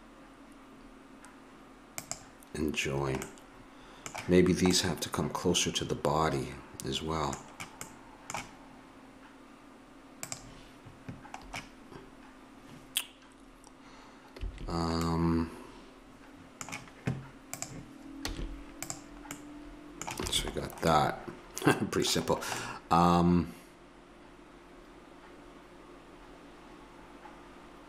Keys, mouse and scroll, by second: 2.8-6.9 middle drag, 7.9 middle click, 10.2-12.2 right drag, 12.2-15.0 middle drag, 14.3 a, 17.5-19.3 right drag, 18.3 x, 20.3 a.